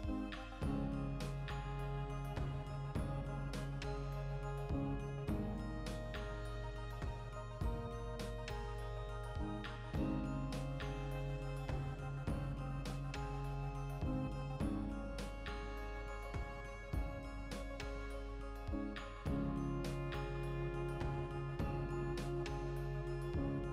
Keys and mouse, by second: 0.1 alt+q, 0.7 Tab, 1.3 g, 1.6 click, 1.6 z, 1.9-3.9 ctrl+shift+middle drag, 2.3 z, 2.8 g, 3.9 shift+click, 4.1-7.4 ctrl+middle drag, 4.4 Tab, 4.5 a, 5.5 s, 7.4 shift+click, 7.5-13.4 middle drag, 7.8 z, 13.0 2, 13.4 alt+right click, 13.6-15.4 shift+middle drag, 14.6 e, 15.4 click, 15.7 z, 16.5-19.1 ctrl+shift+middle drag, 17.7 e, 19.1 click, 19.5 e, 20.9 click, 21.2 e, 22.9 click, 23.1 e.